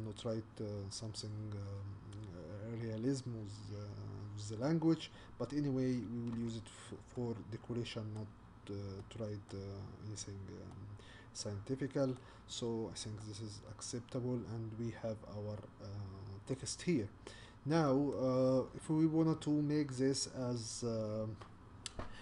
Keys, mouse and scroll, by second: 6.3 Tab, 7.1-9.7 middle drag, 9.7-10.7 scroll up 4, 10.7-12.3 middle drag, 12.3-12.8 scroll down 3, 12.8-13.2 scroll up 4, 13.2-16.2 middle drag, 16.6-17.2 scroll down 1, 17.2-17.8 scroll down 2, 17.8-22.2 middle drag.